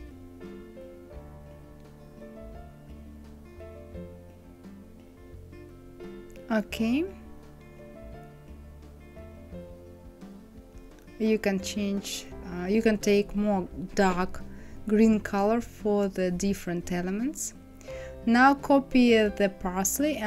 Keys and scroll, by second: 10.4 KP_5, 10.6 Return.